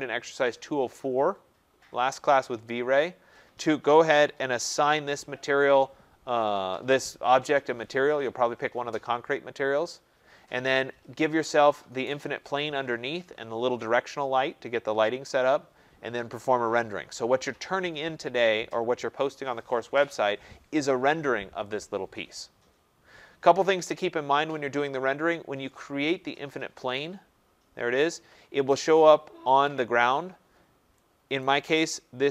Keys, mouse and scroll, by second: 26.9 click, 28.7 right click.